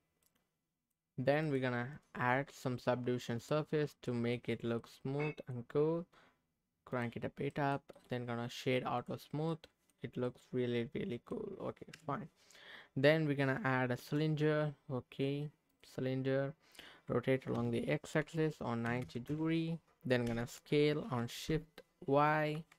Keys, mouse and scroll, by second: 0.2-1.4 middle drag, 3.5 click, 3.8 scroll up 1, 4.1 middle click, 4.6 scroll up 2, 4.8 middle click, 5.7-6.9 scroll down 1, 6.9 click, 7.5 middle click, 7.9-9.1 right drag, 9.4 scroll up 2, 9.5 middle click, 9.9 scroll down 2, 10.2-11.3 middle drag, 11.9 KP_3, 12.6-13.0 scroll up 2, 14.0 shift+a, 16.1-17.0 scroll down 2, 17.6 r, 18.1 x, 18.9 KP_9, 19.0 KP_0, 19.3 KP_Enter, 20.3 s, 22.5 shift+y.